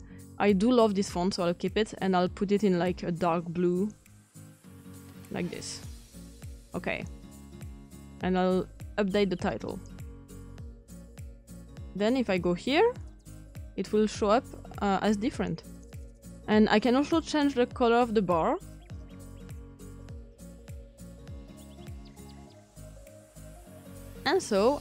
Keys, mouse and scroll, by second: 4.3-5.1 typing, 4.6-6.2 drag, 9.1-12.3 drag, 13.4-16.5 drag, 17.2-18.6 drag, 19.4 click, 21.5 click.